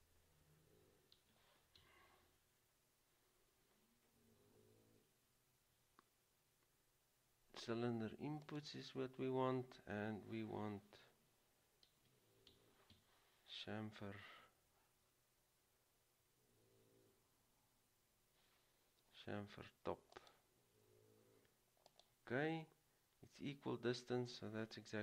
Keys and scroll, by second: 1.3-1.9 typing, 12.1-13.6 typing.